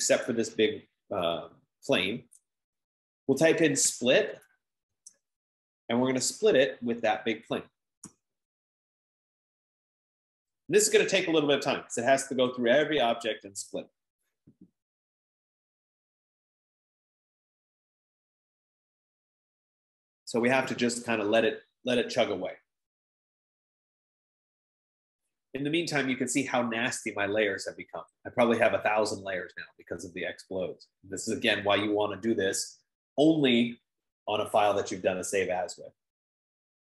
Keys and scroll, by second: 4.0-5.5 typing, 8.5 typing.